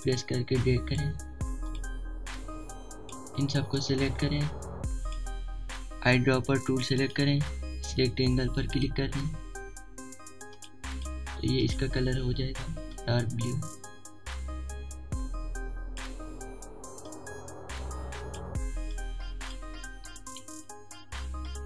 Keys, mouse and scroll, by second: 0.0-0.1 typing, 15.7 ctrl+z, 16.0 click, 17.0-18.8 drag, 18.8 typing, 19.3 alt+scroll down 1.